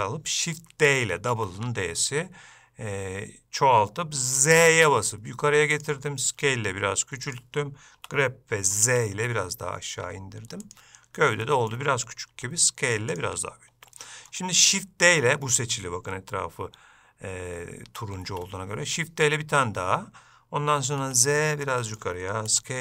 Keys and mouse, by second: 11.6 shift+middle click, 14.1 shift+middle click, 18.4 shift+d.